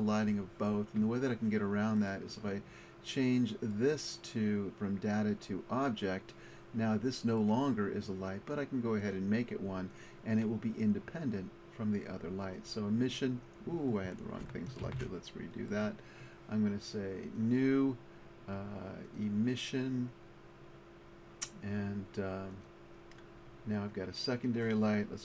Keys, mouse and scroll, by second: 2.0-5.8 middle drag, 15.0 ctrl+z, 15.9-21.3 drag, 24.4-25.2 middle drag.